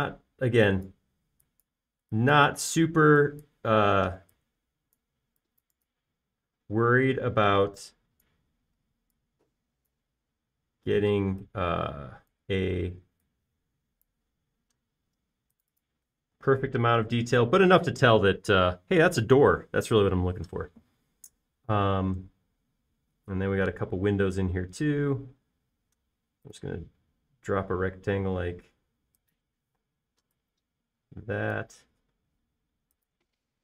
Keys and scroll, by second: 5.3 p, 7.6-8.1 typing, 13.8 Escape, 17.7 space, 26.2 r.